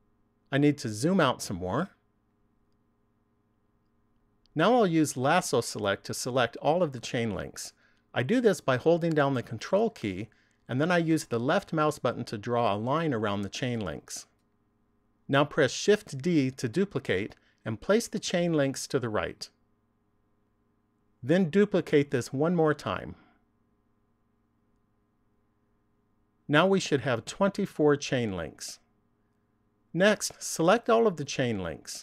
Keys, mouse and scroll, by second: 1.4 scroll down 1, 2.9 shift+middle click, 8.3 ctrl+click, 15.7 shift+d, 20.4 click, 23.3 shift+d, 25.5 click, 30.4 ctrl+click.